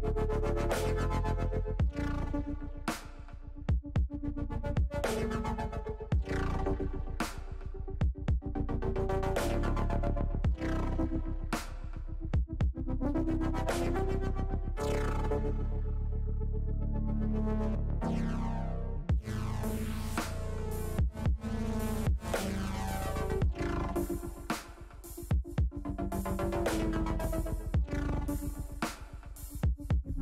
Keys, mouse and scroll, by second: 2.8-3.9 middle drag, 4.7-5.8 middle drag, 6.6-8.7 middle drag, 9.0 click, 11.0 Tab, 11.3 middle click, 12.4 middle click, 13.6-14.7 middle drag, 16.0 middle click, 17.1-18.3 middle drag, 18.8-20.0 middle drag, 21.0 middle click, 23.6 middle click, 24.7 middle click, 25.0 middle click, 25.5 middle click, 27.2 middle click, 28.1 click, 29.6 Delete.